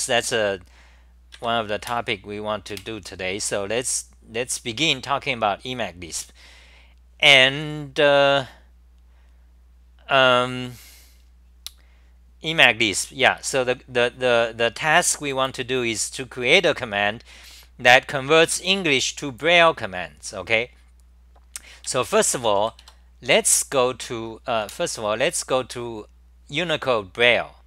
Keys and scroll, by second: 1.8 super+w, 2.7 super+r, 23.3 Return, 24.7 super+w.